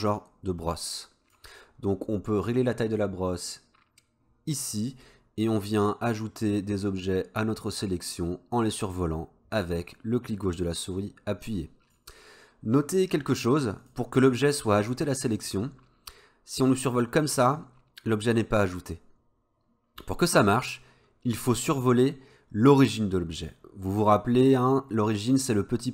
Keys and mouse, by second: 3.0-5.0 drag, 5.8-12.0 drag, 13.8 click, 16.8-25.9 drag.